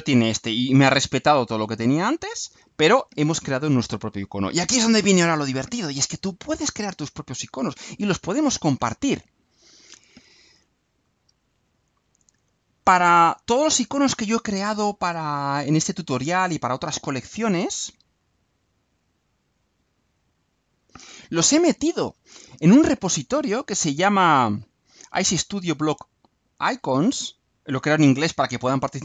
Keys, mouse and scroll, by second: 9.9 click, 11.0-11.5 scroll up 1, 11.9 click, 12.9-13.2 scroll down 2, 14.6-15.5 scroll down 4, 16.4-16.7 scroll down 2, 16.9-17.5 scroll down 2, 20.0 click, 21.9-22.3 scroll down 2, 27.6 click.